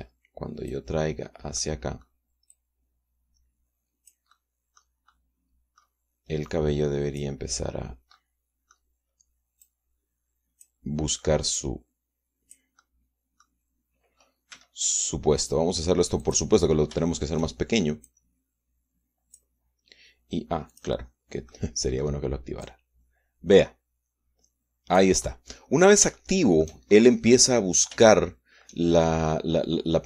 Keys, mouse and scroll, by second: 0.5-1.6 drag, 2.3 middle click, 2.9-3.2 scroll up 1, 3.2-5.0 drag, 5.0-5.7 scroll up 1, 5.8 middle click, 7.2 click, 8.8 middle click, 10.4-11.6 drag, 12.3-13.4 drag, 13.4-17.0 middle drag, 15.2 s, 17.0 click, 17.8 shift+click, 18.8-20.3 drag, 21.4 click, 22.2 click, 23.4-25.9 drag, 25.9 middle click, 26.0 click, 27.0 shift+click, 27.6-28.0 shift+scroll up 1, 28.0-29.6 drag.